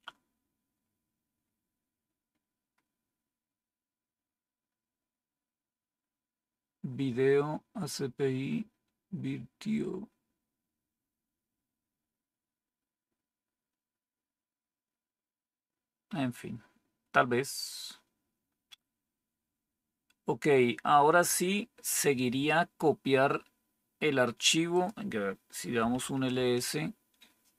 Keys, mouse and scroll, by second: 25.4-26.4 typing.